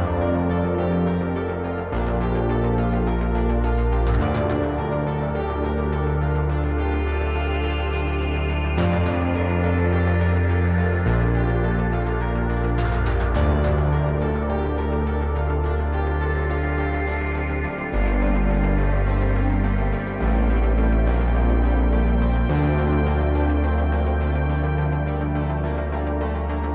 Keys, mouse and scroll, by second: 3.1-4.2 drag, 5.0 click, 6.0 click, 7.2-9.7 drag, 10.5 click, 13.1 click, 14.6 click, 20.4 click, 21.8 click, 24.5 click.